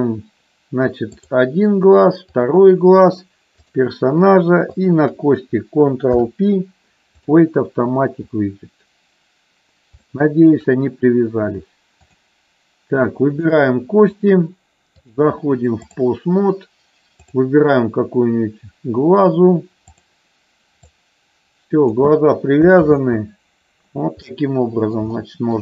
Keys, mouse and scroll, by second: 1.1 click, 3.6 shift+click, 4.7 shift+click, 6.0 ctrl+p, 10.0 shift+middle click, 14.8-16.0 drag, 17.3 click, 20.0 click, 20.9 click, 22.9 ctrl+z, 24.2 middle click, 25.1 shift+middle click.